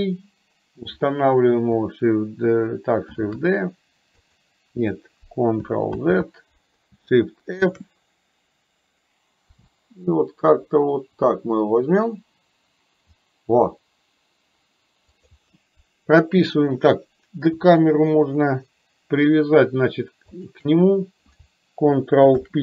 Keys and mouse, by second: 3.2 shift+d, 6.0 ctrl+z, 7.7 shift+f, 20.5 shift+click, 22.3 ctrl+p.